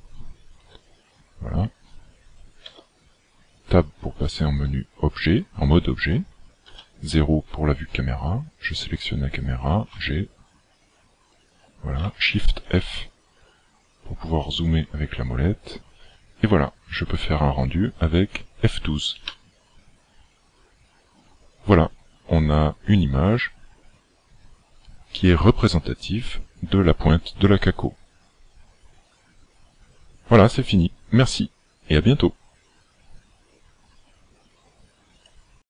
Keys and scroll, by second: 2.7 Tab, 6.6 KP_0, 9.9 g, 12.5 shift+f.